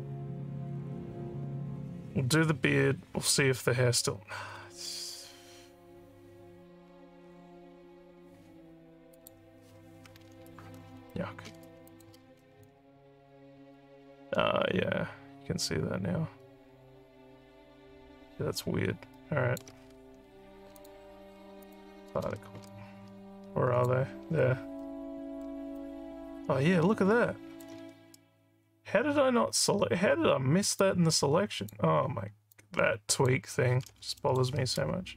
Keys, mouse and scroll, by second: 9.2 click, 11.9 click, 12.6-19.6 alt+drag, 20.8 click, 21.6 click, 22.7-23.9 alt+drag, 24.8 alt+middle click, 25.8-27.6 alt+drag, 30.8 click, 32.6 click, 34.2 alt+middle click.